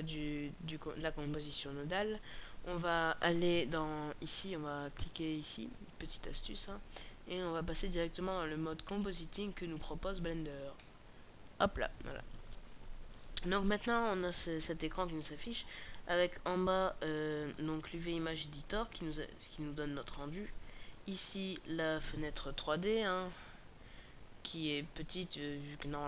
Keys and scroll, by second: 18.0-18.6 scroll down 5, 18.7 KP_5, 19.6 KP_5, 21.1 KP_0.